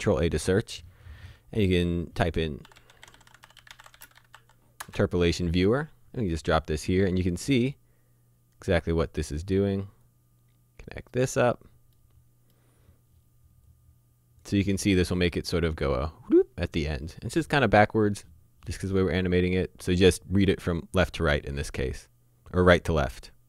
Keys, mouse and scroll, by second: 2.7-4.3 typing, 4.8 Return, 6.4 click, 10.0 click, 12.0 middle click, 13.7 click.